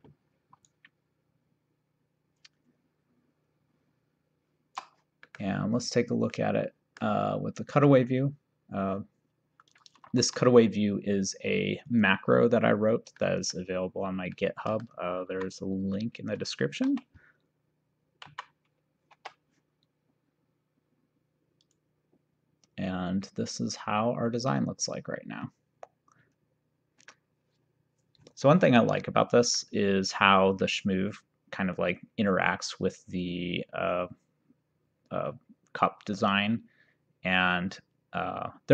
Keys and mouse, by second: 1.3 shift+right click, 5.3 middle click, 6.4 middle click, 7.8 click, 9.8 click, 10.3 2, 11.9 click, 13.2 middle click, 14.5 middle click, 15.4 v, 16.9 7, 18.5 v, 19.1 shift+6, 21.7 click, 27.1 middle click.